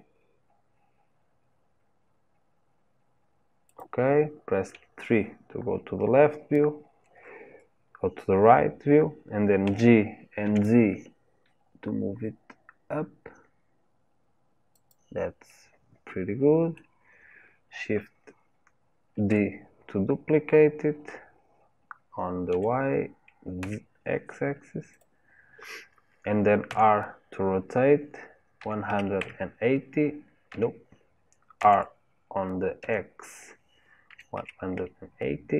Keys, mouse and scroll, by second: 4.7 KP_3, 9.7 g, 15.5-19.1 middle drag, 19.1 shift+d, 26.7 r, 31.6 r.